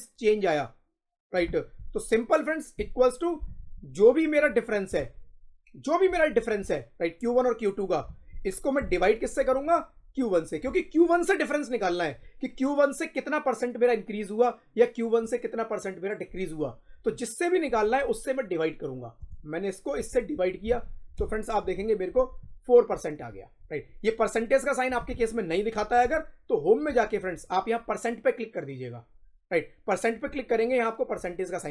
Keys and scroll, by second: 2.6 =, 8.7 /, 21.1 Return, 21.5 Up.